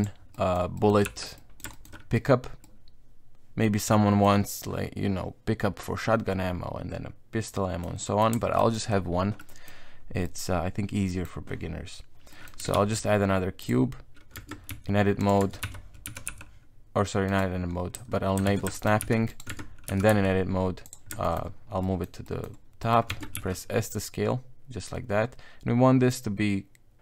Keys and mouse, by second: 0.0 click, 0.3 middle click, 0.7 middle click, 1.0 z, 1.4 middle click, 1.7 shift+middle click, 2.6-4.2 middle drag, 7.5 middle click, 8.0 middle click, 8.4 shift+middle click, 8.7 middle click, 9.4 middle click, 10.2 middle click, 11.0 middle click, 12.3 middle click, 12.7 shift+a, 14.4 Tab, 14.7 s, 15.4 Tab, 15.6 KP_1, 16.0 g, 18.5 shift+Tab, 18.7 shift+middle click, 19.0 g, 19.5 Tab, 19.9 g, 21.2 shift+middle click, 21.8 middle click, 22.2 middle click, 22.8 middle click, 23.1 Tab, 23.3 s.